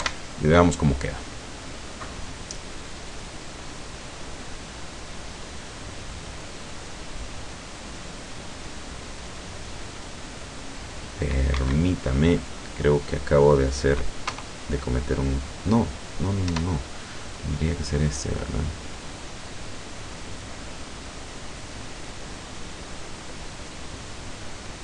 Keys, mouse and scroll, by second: 0.0 F12, 11.6 Escape, 13.5 right click, 14.4 KP_0, 16.5 F12.